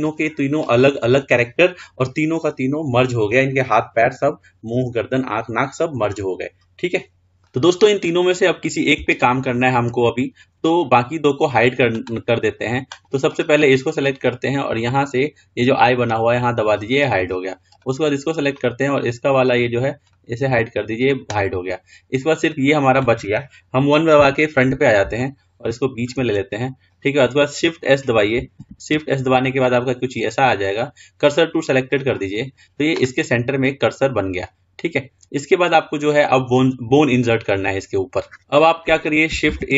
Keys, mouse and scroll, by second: 8.3-10.2 middle drag, 10.2-10.6 scroll up 2, 10.6-11.5 scroll down 2, 11.5-12.6 scroll up 2, 12.6-13.2 drag, 13.5 click, 16.3 click, 17.9 click, 22.6 click, 24.4 KP_1, 25.4-26.5 shift+middle drag, 26.5-28.8 scroll up 1, 28.8 shift+s.